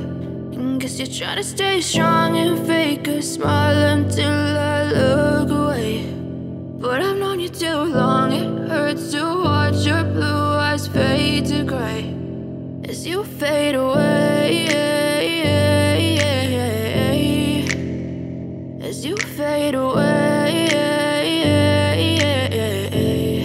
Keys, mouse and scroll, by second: 5.7 v, 6.7-15.9 drag, 20.1 ctrl+space, 20.3 ctrl+click, 21.1 space, 21.4-22.9 ctrl+drag, 22.9 t.